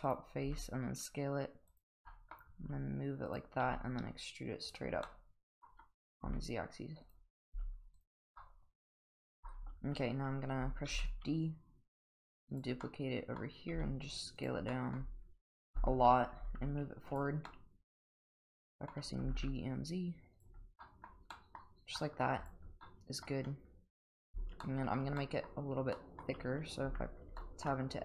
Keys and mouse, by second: 0.0 click, 0.4 s, 2.1 middle click, 2.6 g, 3.6 e, 5.1-5.6 middle drag, 6.2 s, 7.4 g, 8.4-9.5 middle drag, 9.8 Tab, 10.9 shift+d, 12.8-13.4 middle drag, 13.7 s, 14.7 middle drag, 15.6 KP_7, 16.6 g, 17.5-18.9 middle drag, 19.2 g, 20.8 middle drag, 21.3 middle drag, 22.0 middle drag, 22.8-23.3 middle drag, 24.7 shift+middle drag, 25.2 middle drag, 25.9 middle drag, 26.8 Tab, 27.4 shift+middle click.